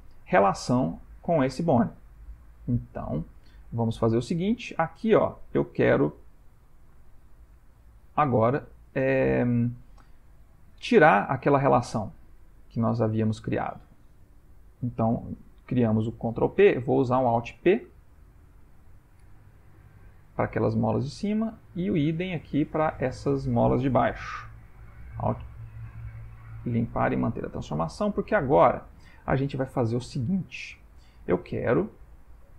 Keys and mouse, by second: 2.0 ctrl+middle click, 2.5 middle click, 4.3 click, 6.1 middle click, 7.5 ctrl+middle click, 13.1 ctrl+middle click, 13.7 click, 16.8 alt+p, 18.2 Down, 19.7 shift+middle click, 20.7 click, 21.3 click, 22.2 click, 22.9 click, 24.2 alt+p, 27.0 shift+middle click, 27.6 ctrl+middle click, 28.3 middle click, 29.2 middle click, 29.4 shift+middle click, 32.3 middle click, 32.3 click.